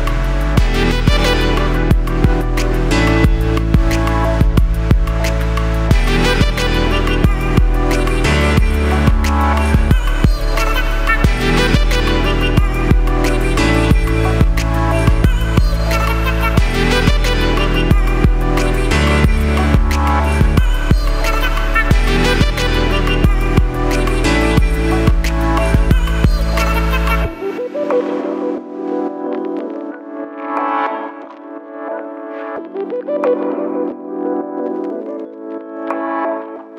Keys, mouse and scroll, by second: 13.4 r.